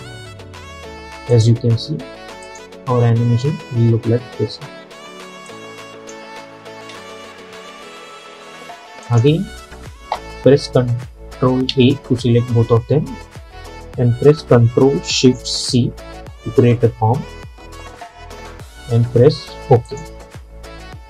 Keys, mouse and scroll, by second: 1.4 click, 3.0 space, 4.9 space, 5.6-6.9 drag, 6.9 space, 9.1 click, 11.8 ctrl+a, 15.7 ctrl+shift+c, 19.9 click.